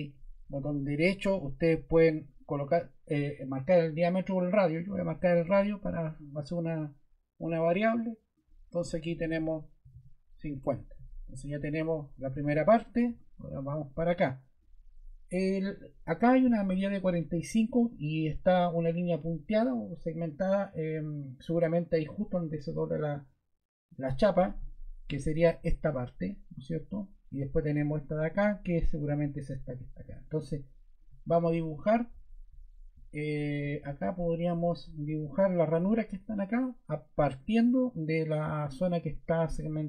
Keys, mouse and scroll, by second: 9.5-10.4 typing, 10.5 Return, 33.2 click.